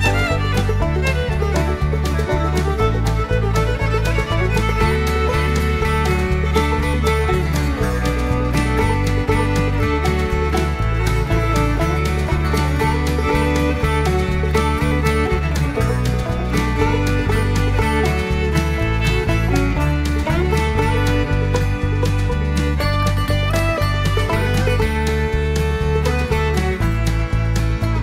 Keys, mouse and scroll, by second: 0.4 click, 2.2 click, 4.8 click, 5.6 space, 7.8 click, 10.3 click, 11.2 click, 13.5 click, 14.4 click, 16.3 click, 18.8 click, 22.2 click, 23.5 click, 25.4 click, 27.5 v.